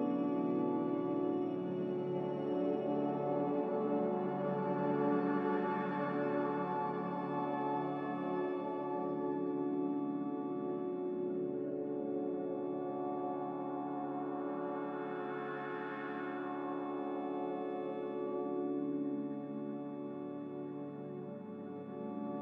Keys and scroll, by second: 14.9 1, 15.7 \, 15.9 BackSpace, 16.4 BackSpace, 19.7 BackSpace, 19.7 3, 21.7 5.